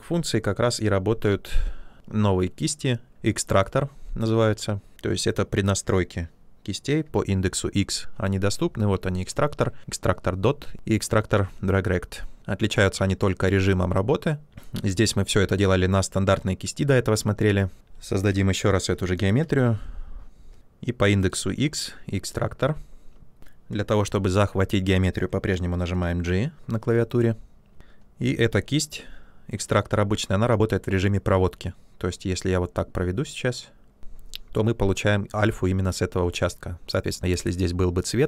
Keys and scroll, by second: 7.0 x, 14.5 h, 18.8-20.5 typing, 23.4 ctrl+z, 26.8 g, 27.8 space.